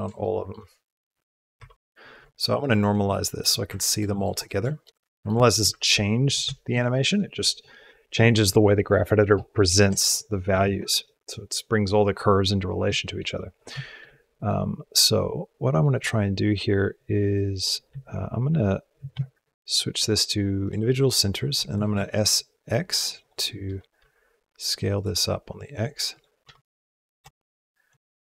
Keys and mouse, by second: 0.1 shift+middle click, 1.4 KP_Decimal, 2.5 click, 3.0 shift+middle click, 3.5 ctrl+middle click, 4.2 click, 4.6 shift+click, 4.9 ctrl+click, 5.3 shift+click, 5.7 ctrl+click, 5.9 ctrl+middle click, 6.4 shift+middle click, 10.8 click, 12.7 shift+click, 13.3 middle click, 13.8 shift+drag, 15.4 drag, 18.4 s, 19.9 click, 21.5 s, 23.5 s, 25.9 click, 26.3 space, 27.1 space.